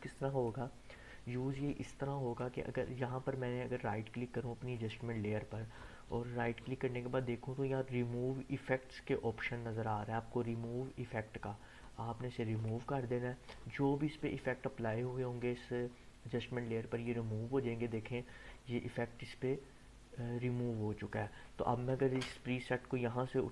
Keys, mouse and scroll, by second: 0.4-2.6 drag, 4.7 right click, 12.5 click, 16.9-21.3 drag.